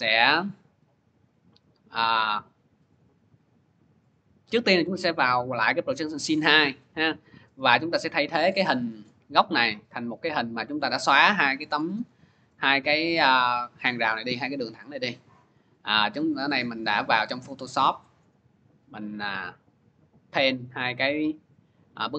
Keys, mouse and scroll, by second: 4.5 click, 7.5 click, 10.3 click, 15.3 click, 16.0 click, 16.2 click, 17.6 click, 17.8 click, 19.0 click, 19.2 click.